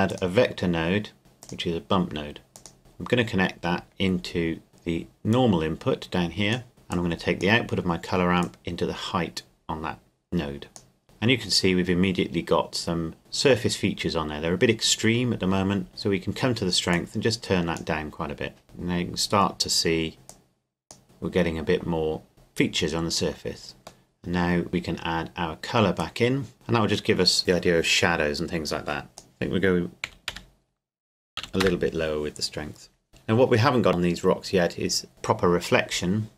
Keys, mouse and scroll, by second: 0.1 click, 3.9-4.7 scroll down 1, 4.7 middle click, 5.3 click, 12.6 scroll up 1, 16.9 click, 18.6-20.3 scroll down 1, 20.3 click, 24.1 middle click, 26.0 click, 29.1 click, 30.1 KP_Decimal, 30.3 KP_3, 31.4 KP_5, 31.6 KP_Enter.